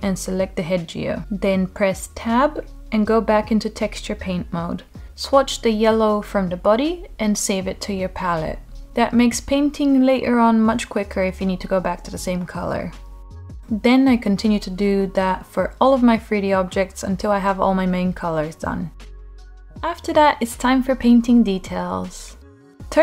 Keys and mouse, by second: 0.1 Tab, 3.2 click, 7.5 click, 7.8 Tab, 8.9-10.6 drag, 11.3 Tab, 13.4 Tab, 13.8 Tab, 14.8 click, 16.0 s, 17.1 Tab, 18.8 Tab, 19.4 middle click, 20.6 middle click, 22.4-23.0 drag.